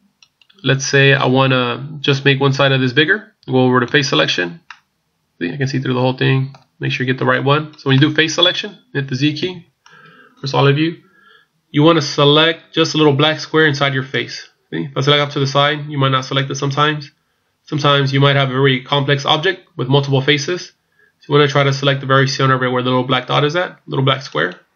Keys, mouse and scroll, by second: 0.2 right click, 3.9 click, 4.7 middle click, 7.9 middle click, 9.4 z, 14.2 right click, 15.4 right click, 24.4 right click.